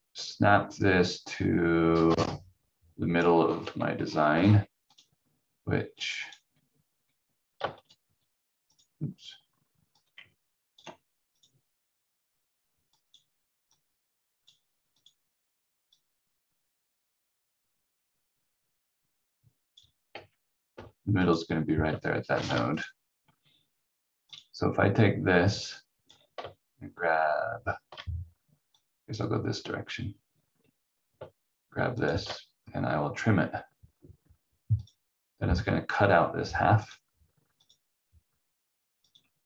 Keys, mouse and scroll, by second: 3.4 scroll down 1, 6.2 click, 7.8 shift+click, 8.0 c, 8.7 click, 20.1 v, 20.7 v, 24.3 click, 28.7 click, 31.9 shift+click.